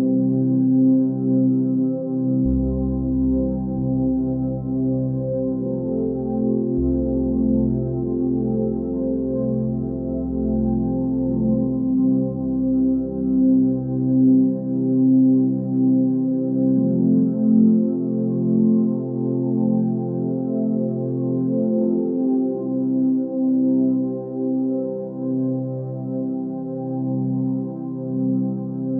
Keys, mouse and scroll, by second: 4.9 ctrl+space, 8.7 ctrl+space, 12.9 ctrl+z, 16.3 ctrl+z, 19.5 ctrl+z, 21.0 x, 22.2 ctrl+space, 23.2 click, 26.2 ctrl+space, 27.0 x.